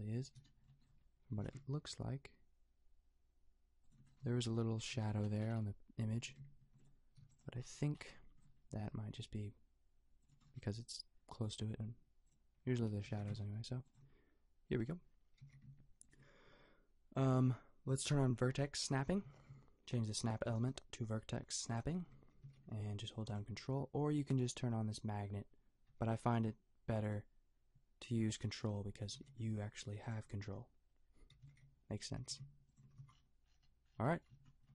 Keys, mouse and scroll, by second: 1.4 g, 5.2 middle click, 6.1 g, 7.2 b, 8.8 g, 12.1 click, 13.0 g, 15.4 g, 19.2 g, 22.4 g, 28.3 g, 29.2 g, 31.3 g, 32.1 g, 33.0 a.